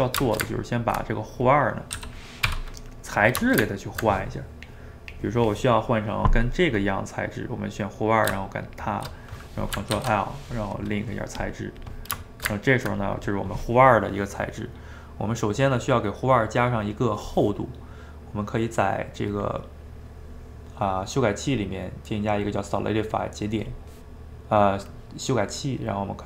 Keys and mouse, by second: 0.3-1.5 ctrl+shift+middle drag, 1.5 click, 1.9 g, 2.8-6.7 middle drag, 8.7 shift+click, 10.0 ctrl+l, 11.5 click, 11.9 click, 12.3 shift+right click, 12.5-15.7 ctrl+middle drag, 19.3 click, 21.5-24.5 drag, 25.8-26.2 drag.